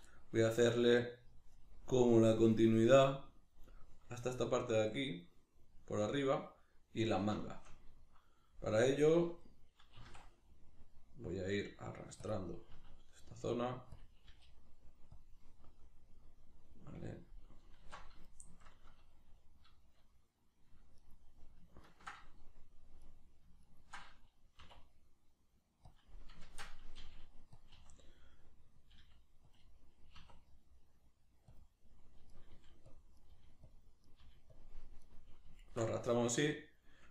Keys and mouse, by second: 10.0 e, 12.3 click, 12.8 s, 14.0 click, 14.3 g, 15.2 click, 15.4-21.0 middle drag, 17.8 alt+q, 21.0 right click, 22.4 right click, 23.6 ctrl+right click, 24.6 e, 26.0 click, 26.5 shift+Tab, 27.6 click, 27.8 r, 28.9 click, 29.0 g, 29.6 click, 30.2 e, 31.6 click, 32.3 right click, 32.5 g, 33.0 click, 33.2 right click, 33.3 g, 33.8 click, 34.0 right click, 34.2 g, 34.6 click, 35.0 right click, 35.6 shift+right click.